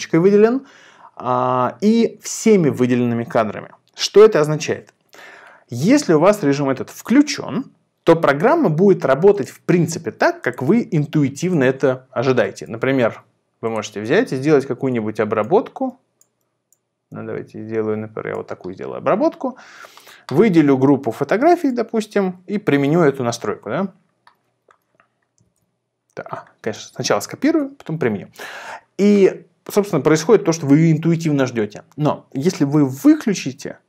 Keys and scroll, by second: 22.7 shift+super+v, 25.4 shift+super+v, 26.7 shift+super+c, 27.5 shift+super+v.